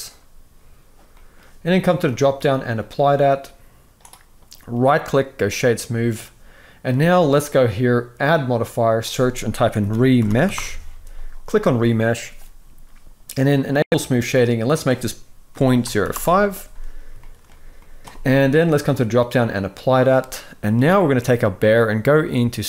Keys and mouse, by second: 0.8 middle click, 1.8-3.3 drag, 4.5-5.3 right drag, 7.9-11.4 drag, 13.7-15.9 drag, 16.9-18.0 shift+middle drag, 18.7-19.2 drag, 20.0 middle click.